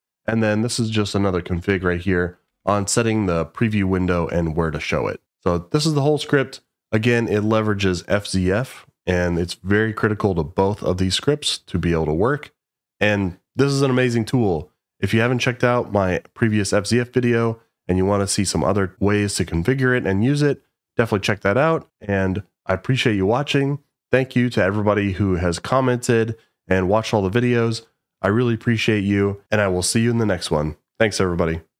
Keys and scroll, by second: 0.5-1.7 typing, 2.5 Escape.